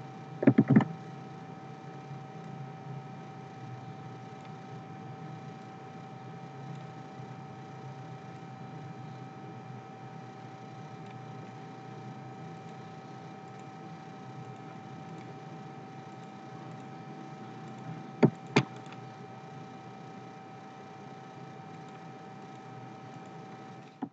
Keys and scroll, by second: 0.4 ctrl+c, 0.7 ctrl+f.